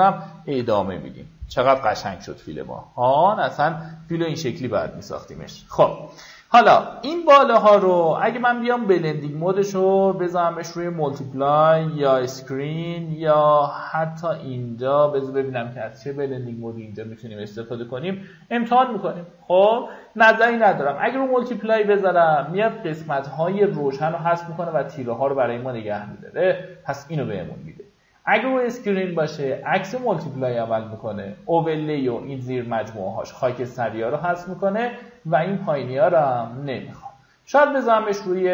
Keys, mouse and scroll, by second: 0.2 alt+scroll up 1, 0.7-3.7 drag, 37.7 click.